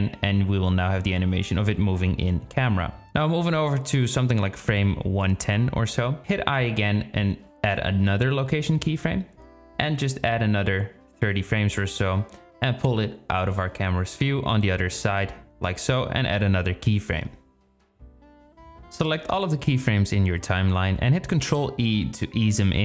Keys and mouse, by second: 0.2 i, 2.8-6.5 drag, 13.0-14.2 drag, 16.0 g, 16.5 g, 17.0 i, 18.8 click, 19.1 space, 19.2-19.7 drag, 21.4 ctrl+e.